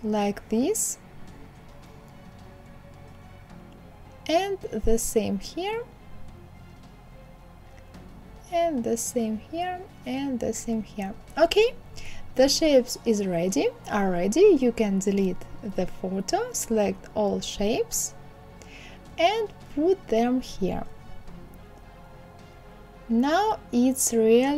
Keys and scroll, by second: 12.7 Delete.